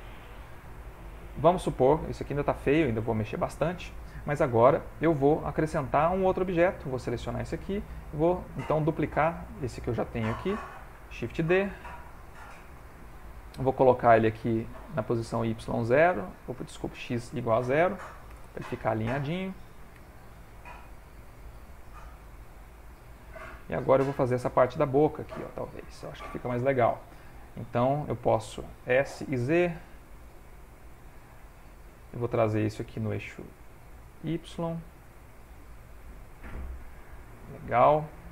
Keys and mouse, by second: 0.7 ctrl+middle click, 2.1 shift+middle click, 3.0 ctrl+middle click, 7.2 alt+click, 7.9 ctrl+middle click, 8.4 ctrl+middle click, 9.1 click, 10.6 shift+d, 14.6 click, 15.9 click, 16.9 click, 19.9 g, 21.5 s, 24.9 ctrl+middle click, 28.9 s, 32.8 middle click, 32.8 g.